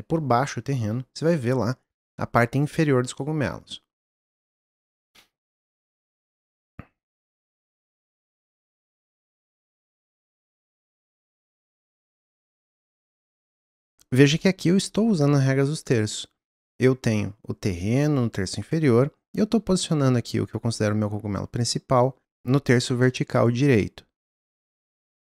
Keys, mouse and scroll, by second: 4.2-6.1 scroll up 1, 6.1 scroll up 1, 6.3-7.3 middle drag, 7.3 click, 10.0 click, 13.8 click.